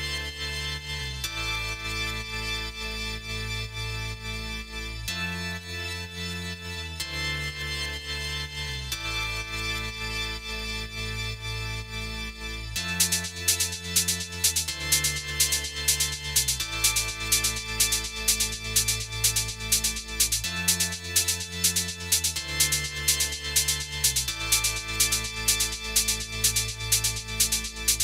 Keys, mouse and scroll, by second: 0.0 click, 1.0 a, 1.3 Tab, 1.8 middle click, 5.0-5.3 scroll up 4, 5.3 middle click, 7.8 click, 8.8 click, 9.9 middle click, 11.9 click, 15.9 click, 16.8 Tab, 17.4 click, 18.2 click, 18.9 middle click, 19.7 click, 20.2 middle click, 21.2-21.5 scroll down 2, 21.5 middle click, 25.8 middle click, 26.5-27.2 scroll down 3, 27.2-27.8 scroll up 1.